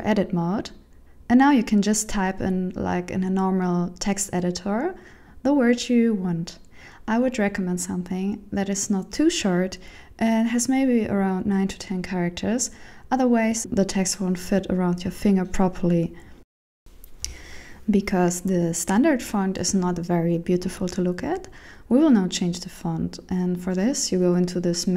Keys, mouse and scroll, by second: 0.0-4.8 typing, 5.7 Tab, 9.2 ctrl+alt+shift+Return, 11.3 Tab, 13.2-14.4 shift+Left, 17.8 click, 20.1-20.6 scroll down 3, 21.6 click.